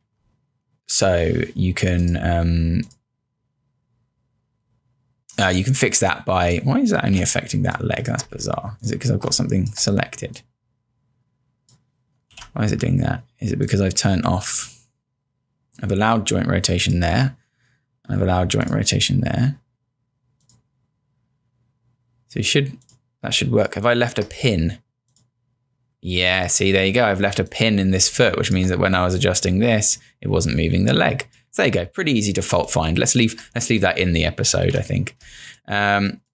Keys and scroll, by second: 0.0 z, 7.0 z, 7.5 space, 8.3 0, 9.3 space, 12.3 z, 23.3 space, 28.1 space, 32.0 =, 32.6 space, 34.7 z, 35.3 space.